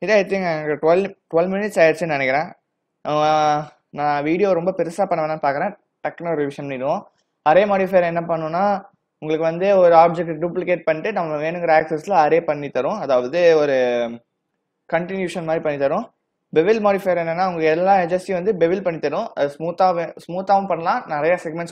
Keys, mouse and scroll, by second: 3.3 click, 15.3 click.